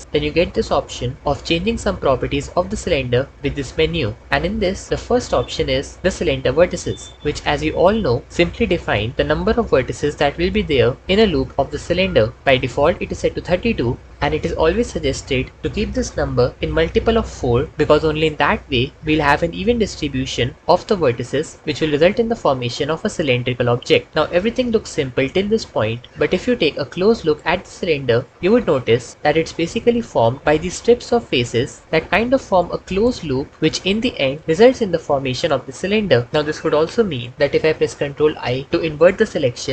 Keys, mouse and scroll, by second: 20.5 Tab, 20.8 1, 28.3 3, 38.3 ctrl+i.